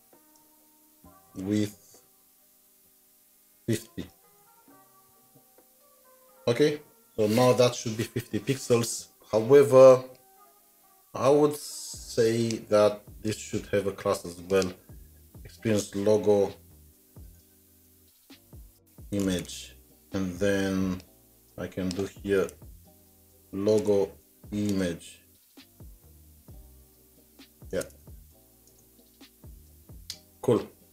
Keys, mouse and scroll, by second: 0.4 Return, 1.2-4.6 typing, 13.1 typing, 13.1 ctrl+c, 14.3-15.4 typing, 22.6 typing, 24.1 typing, 29.4 typing, 29.5 shift+Tab, 30.7-30.9 typing.